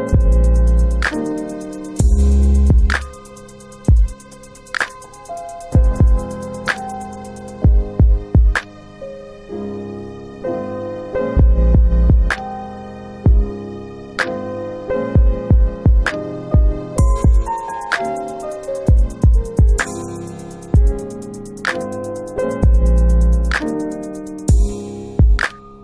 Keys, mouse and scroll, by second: 0.9 click, 6.5 click, 8.3 click, 12.4 alt+click, 13.3 alt+right click, 13.5 alt+right click, 17.0 alt+click, 18.2 alt+click, 19.9 alt+click, 20.0 alt+click.